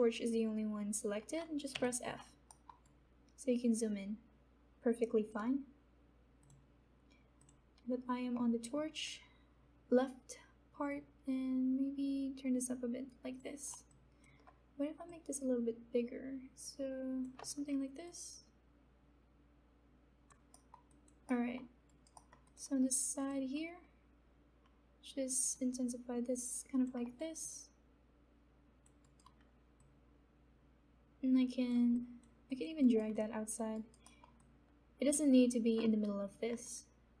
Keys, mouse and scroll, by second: 1.7 f, 2.4 alt+middle click, 3.1-6.4 alt+right drag, 6.4 click, 10.8-14.0 drag, 14.0-20.7 alt+drag, 20.5 alt+middle click, 20.7 alt+middle click, 20.9 alt+click, 21.2 middle click, 22.1 alt+right click, 22.5 alt+click, 25.5-27.1 drag, 27.1 alt+right click, 27.7 alt+click, 29.0 alt+right click, 29.7-32.2 drag, 33.1 alt+right click, 33.1 alt+click, 33.7 alt+right click, 34.1 alt+middle click, 34.3-37.2 alt+drag.